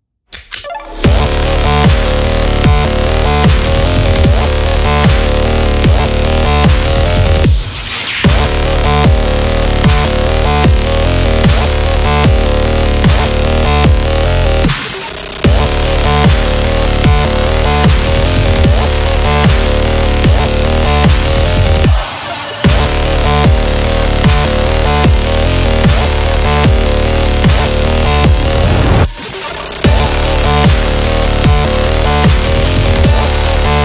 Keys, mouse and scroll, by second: 0.0-2.5 typing, 0.1 click, 0.4 scroll up 1, 0.5 scroll down 1, 1.5 click, 2.0 scroll up 1, 2.0 scroll down 1, 2.1 scroll up 1, 2.8 click, 3.2 scroll up 1, 3.2 scroll down 1, 3.4 scroll up 1, 4.4 click, 4.9 ctrl+j, 5.1 Right, 7.1 click, 7.8 ctrl+j, 8.0 Right, 9.4 scroll down 1, 10.0 scroll up 1, 10.1 scroll down 1, 10.5 space, 10.6 click, 10.7 space, 10.9 scroll down 1, 11.5 scroll up 1, 11.8 space, 11.9 click, 12.0 space, 12.3 scroll down 1, 12.6 scroll up 1, 12.9 space, 13.2 click, 13.2 space, 14.8 click, 16.8 click, 16.8 click, 18.5-23.5 typing, 23.9-26.9 drag, 26.9 Left, 29.3 Up, 31.3 click, 32.4-33.8 typing.